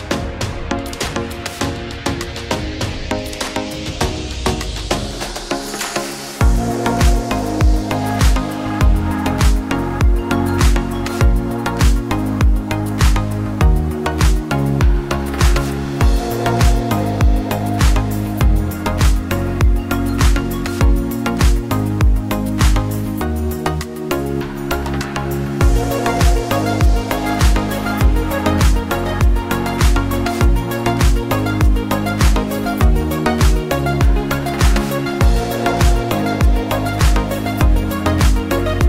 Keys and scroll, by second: 24.8 v.